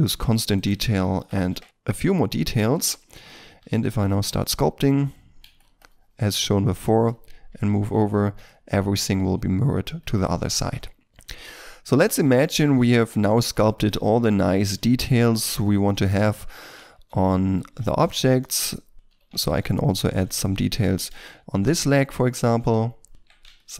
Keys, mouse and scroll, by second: 1.1 KP_2, 1.3 KP_5, 1.5 Return, 3.5 3, 4.0 f, 4.5 double click, 5.4 f, 5.8 double click, 7.0 middle click, 7.4 Tab, 8.1 ctrl+middle click, 8.4 ctrl+middle click, 10.0 middle click, 12.0 ctrl+middle click, 12.7 Tab, 13.3 f, 13.7 double click, 14.6 shift+middle click, 15.1 g, 16.8 ctrl+middle click, 17.2 ctrl+middle click, 17.5 Tab, 18.9 right click, 19.0 shift+middle click, 19.2 Tab, 19.9 f, 20.4 ctrl+middle click, 21.0 ctrl+d, 21.4 3, 23.1 Tab, 23.5 ctrl+middle click.